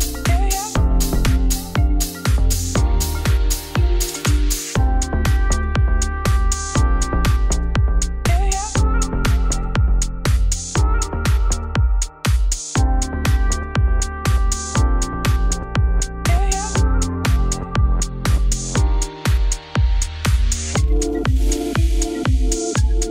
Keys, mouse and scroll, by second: 0.1 KP_Divide, 0.5 middle click, 0.6 3, 0.8 click, 1.3 u, 1.5 middle click, 1.8 2, 2.5 u, 2.7 middle click, 3.3-3.6 scroll down 5, 3.6 KP_Divide, 4.0 Tab, 4.5 a, 7.5 Tab, 7.6 click, 7.8 Tab, 7.9 a, 10.1 ctrl+z, 12.1 middle click, 12.5 3, 12.6 alt+click, 13.0 a, 13.7 click, 14.0 g, 14.6 Tab, 15.0-16.5 middle drag, 16.5 click, 17.1-19.0 drag.